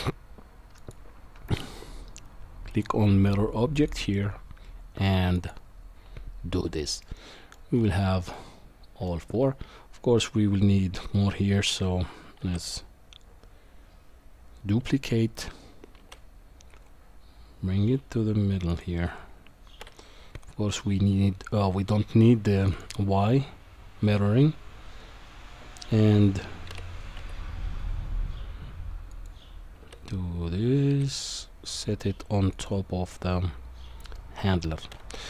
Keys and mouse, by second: 5.3 click, 7.0-7.5 middle drag, 8.3-9.1 shift+middle drag, 12.4 shift+d, 19.8 KP_7, 22.7 click, 26.7 g, 33.1-34.1 middle drag.